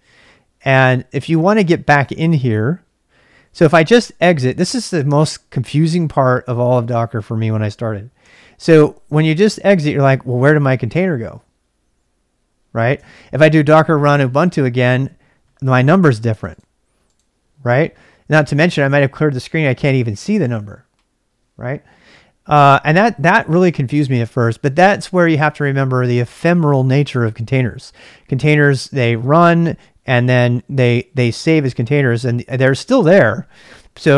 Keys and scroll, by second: 4.0-5.0 typing, 8.3 typing, 9.3 Return, 9.8 typing, 11.4 Return, 11.4 typing, 12.9 ctrl+[, 13.1 k, 14.1 Return, 33.7 ctrl+c.